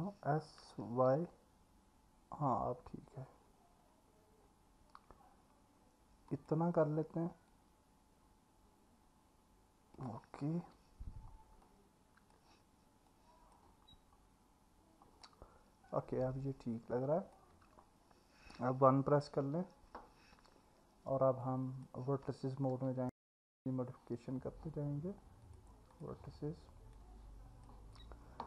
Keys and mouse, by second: 0.6 s, 1.2 y, 11.6-12.3 alt+middle drag, 13.1 click, 15.2-17.3 alt+middle drag, 19.4 KP_1, 21.4 click, 22.7 Tab, 25.9 click, 27.0 click.